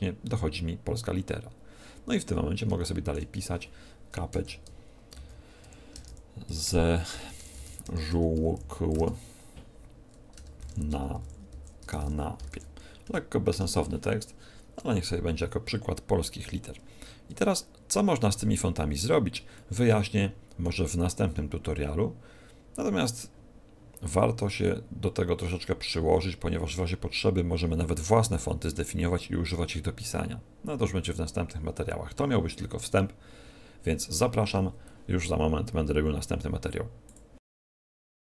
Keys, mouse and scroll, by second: 2.1 scroll down 1, 2.7 shift+middle click, 2.7-3.3 scroll down 3, 3.3 Tab, 4.3 Return, 5.6-8.5 typing, 10.3 Return, 10.5-12.3 typing, 13.0 Return, 13.5 BackSpace, 17.2 Tab, 19.1 scroll up 2, 19.5 shift+middle click, 24.6 shift+middle click.